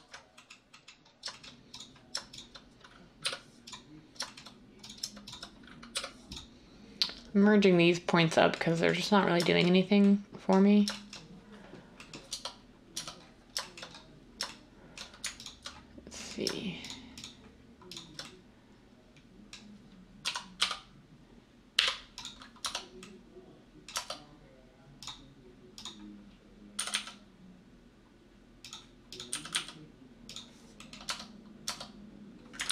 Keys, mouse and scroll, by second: 3.2 m, 5.9 m, 12.3 Tab, 12.9 Tab, 20.2-22.6 typing, 23.9 Tab, 26.8 g, 26.9 g, 29.3 g, 29.5 g, 31.0 Tab, 31.6 Tab, 32.6 ctrl+z.